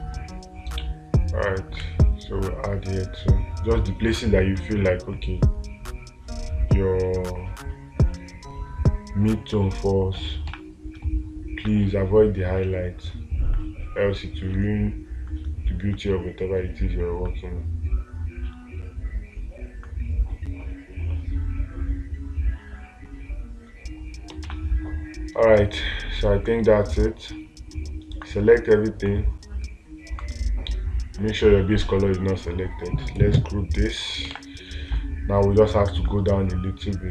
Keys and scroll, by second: 0.0 space, 10.9 space, 24.9 space, 34.8 space.